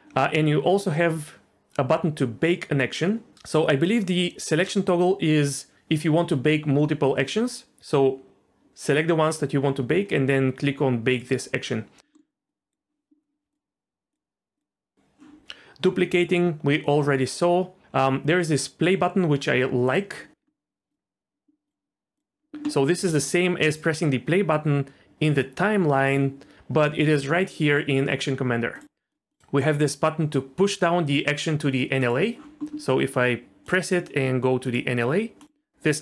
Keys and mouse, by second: 11.1-12.2 drag, 13.5-15.3 drag, 19.9 click, 20.9-22.9 drag, 22.9 space, 28.7-32.1 drag, 33.9 drag.